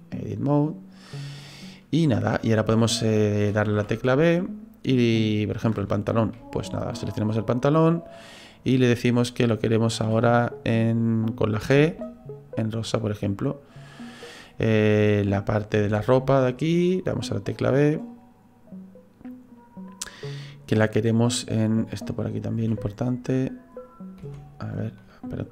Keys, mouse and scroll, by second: 3.8 b, 10.0 b, 11.6 g, 13.0 right click, 15.8 b, 20.7 middle click, 22.6 b, 24.2 v.